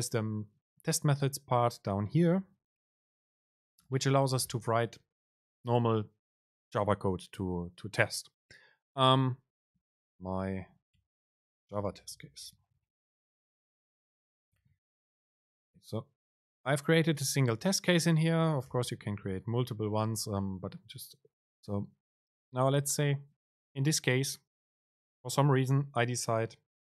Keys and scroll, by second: 3.2 Return, 3.8 Return, 3.9 super+space, 11.1 BackSpace, 15.4 Down, 18.7 Return, 19.4 BackSpace, 20.5 Up.